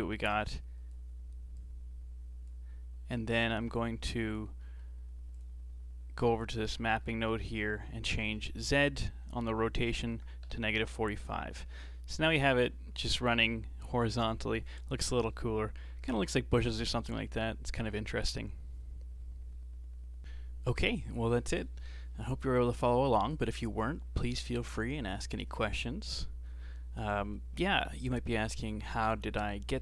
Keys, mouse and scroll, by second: 4.6 middle click, 5.3-6.5 drag, 6.8 scroll up 4, 7.0-8.1 middle drag, 8.1-11.1 drag, 12.3-12.9 scroll up 2, 12.9-14.9 scroll down 1.